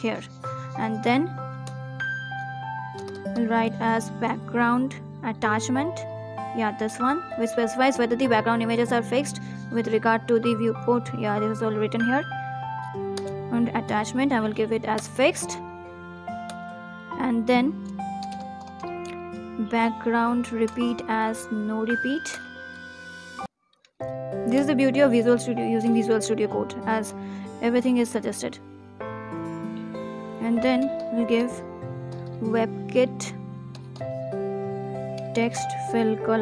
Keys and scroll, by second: 0.3 Right, 0.8 ctrl+s, 3.8 Down, 4.0 Down, 4.1 Down, 4.4 Return, 5.3 Down, 5.4 Down, 5.5 Down, 5.7 Return, 6.9 ctrl+s, 8.0 ctrl+z, 18.1 Return, 27.1 Right, 27.4 Right, 27.7 ctrl+s.